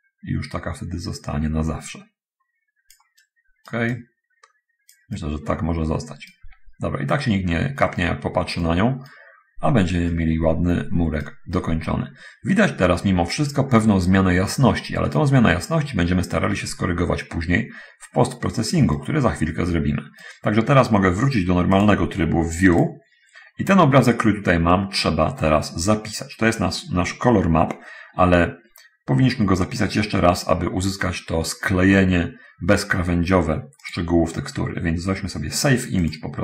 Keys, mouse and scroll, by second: 0.0-3.4 drag, 3.5 right click, 3.8-5.4 drag, 5.4-6.8 right drag, 7.6 scroll down 1, 8.1 middle click, 8.7-9.5 right drag, 10.3-11.3 right drag, 12.7-13.6 scroll up 1, 13.6 scroll down 1, 17.3-18.6 middle drag, 18.8-20.4 right drag, 23.0 click, 24.4 middle click, 33.8 click, 36.2 click.